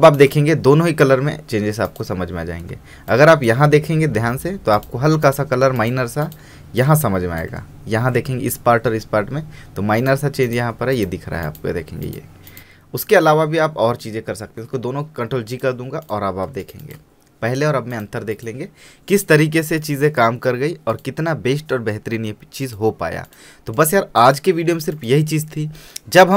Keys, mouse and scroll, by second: 0.1 space, 0.2 right click, 0.4 click, 2.9 ctrl+space, 3.3 ctrl+click, 3.4 ctrl+space, 4.9 click, 6.7 space, 6.9-10.1 ctrl+drag, 14.6 ctrl+g, 15.7 click, 16.6 space, 16.8 right click, 17.0 click, 24.8 space, 24.9 right click, 25.1 click.